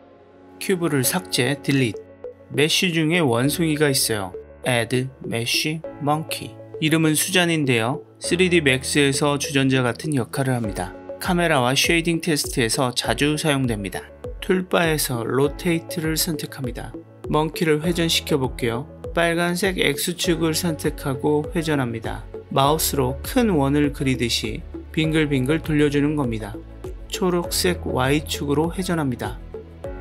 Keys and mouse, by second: 1.7 Delete, 4.8-8.2 drag, 14.1 click, 19.9 click, 21.0-25.5 drag, 28.8 click, 29.1-30.0 drag.